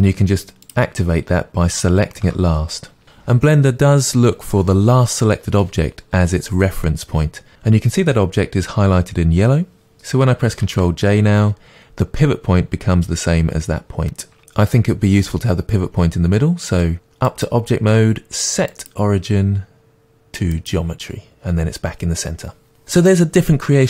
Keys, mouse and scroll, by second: 10.7 ctrl+j, 20.7-23.8 drag.